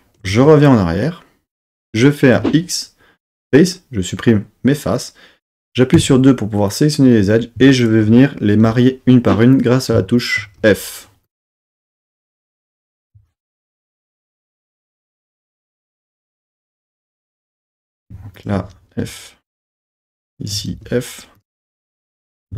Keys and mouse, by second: 0.3 super+z, 2.4 x, 6.0 2, 6.7 click, 7.8 shift+click, 8.6 f, 9.5 click, 10.2 shift+click, 10.6 f, 11.2 click, 11.8 shift+click, 12.0 f, 13.0 click, 13.9 shift+click, 15.0 f, 17.0 super+z, 17.6 click, 18.4 shift+click, 19.0 f, 19.6 click, 20.4 shift+click, 20.7 f, 21.4 click, 22.1 click.